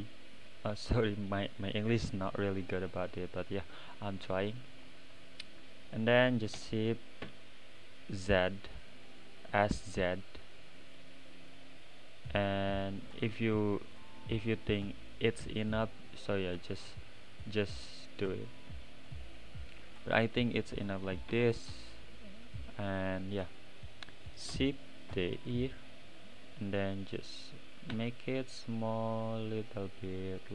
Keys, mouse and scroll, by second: 0.2 click, 5.0-6.8 right drag, 5.0 middle click, 6.8 s, 10.8-12.9 middle drag, 12.9-13.3 scroll up 2, 13.3-14.9 middle drag, 14.9-15.4 scroll down 2, 15.4 `, 15.9-16.5 right drag, 15.9 middle click, 16.5 scroll down 3, 16.7-17.3 right drag, 16.7 middle click, 17.3-18.0 middle drag, 18.0 click, 18.3-20.1 middle drag, 20.1 click, 20.3-21.0 middle drag, 21.0 s, 23.1 click, 23.4 click, 25.1 shift+d, 26.0-27.9 right drag, 26.0 middle click, 27.9 s.